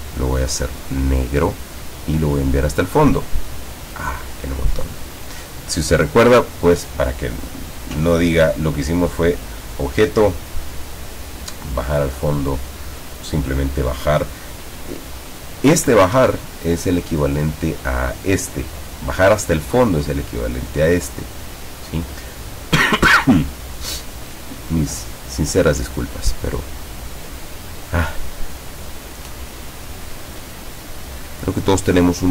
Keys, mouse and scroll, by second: 0.9 click, 2.6 click, 6.6 click, 16.2 Escape, 26.9 click, 27.5 click, 28.0 click, 29.5-30.2 ctrl+scroll up 2, 31.4-32.3 drag.